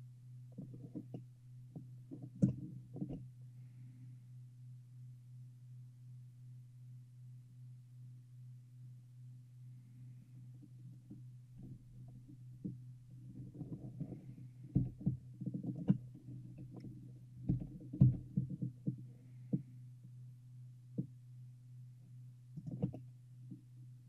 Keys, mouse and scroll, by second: 0.9-1.3 scroll up 1, 1.3-4.9 middle drag, 14.9 g, 17.6 g, 23.1-24.0 middle drag.